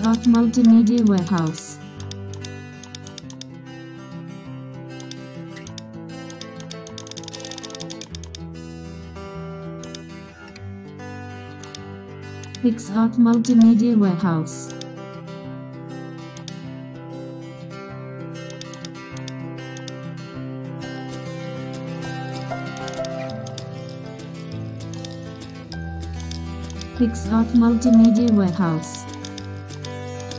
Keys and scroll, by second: 8.4 super+0, 12.0 super+e, 14.0 alt+shift+super+c, 28.2 super+space, 29.6 super+space.